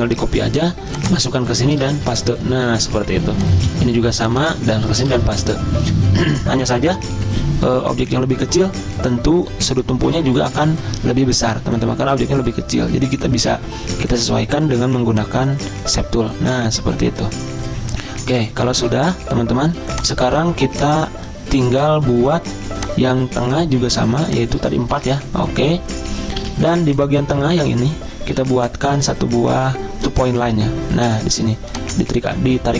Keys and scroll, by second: 1.7 ctrl+v, 2.1 Return, 24.9 ctrl+v, 25.0 Return, 26.4 z.